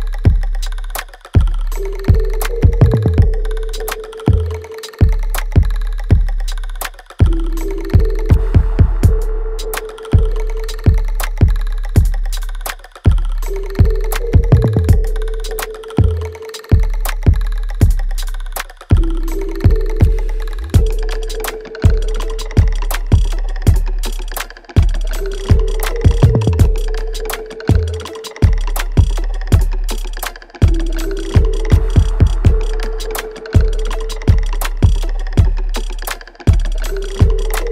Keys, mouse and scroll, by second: 0.9 space, 2.8-4.9 alt+right drag, 4.9 space, 5.3 click, 5.4 space, 8.6 click, 10.0 space, 10.2-12.0 alt+right drag, 12.0 ctrl+click, 14.2 space, 14.9 alt+right click, 15.6-17.6 alt+drag, 17.6 alt+right click, 17.9 alt+click, 18.5 alt+middle click, 19.1 ctrl+click, 19.7 alt+middle click, 20.4-21.7 alt+drag, 21.7 alt+right click, 22.4 alt+middle click, 22.9 alt+right click, 24.5 click, 24.7 click, 26.9 alt+right click, 27.4-29.4 alt+middle drag, 29.4-30.8 alt+right drag, 30.8-32.2 alt+middle drag, 32.2 alt+right click, 32.2-33.8 alt+right drag, 33.8-37.7 ctrl+drag.